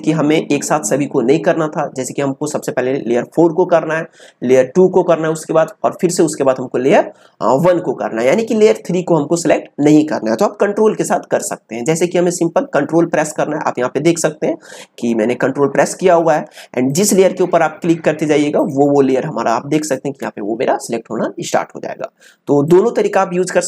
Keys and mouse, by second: 16.9 ctrl+click.